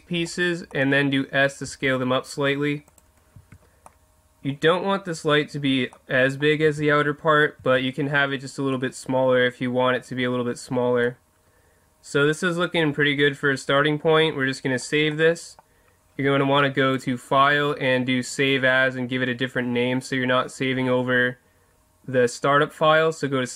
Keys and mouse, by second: 1.6 s, 2.9 click, 3.4 Tab, 3.9-4.8 middle drag, 6.7 Tab, 7.6 Tab, 13.1-15.1 middle drag, 15.4 middle click, 16.9-18.8 drag.